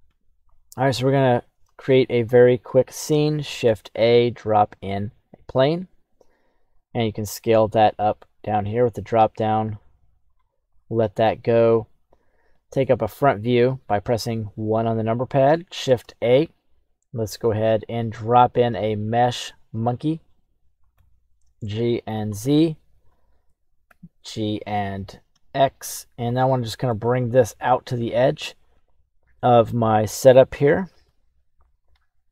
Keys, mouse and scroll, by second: 1.3 right click, 3.4 shift+a, 6.7 click, 7.9-9.2 drag, 10.2 click, 10.9 middle click, 11.4 scroll down 1, 12.5 KP_1, 15.8 shift+a, 20.9 g, 23.0 click, 23.8 g, 26.4-26.9 middle drag, 27.4-27.8 scroll down 1, 29.3 middle click, 29.8 right click, 30.7 g.